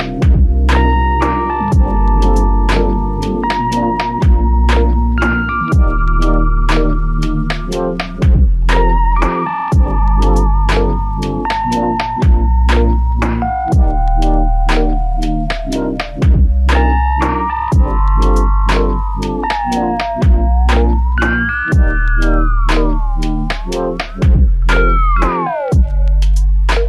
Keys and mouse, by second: 1.1-2.4 typing, 4.7 double click, 12.6 typing.